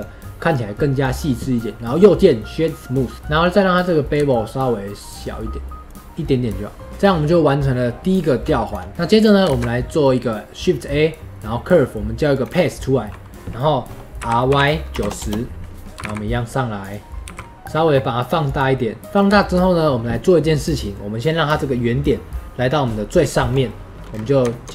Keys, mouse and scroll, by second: 3.1 scroll up 1, 3.2 middle click, 4.0-6.9 drag, 6.9-9.1 middle drag, 9.1 click, 9.4 shift+a, 12.7-19.1 middle drag, 19.1 scroll down 3, 19.3-24.0 shift+middle drag, 24.0 scroll up 1.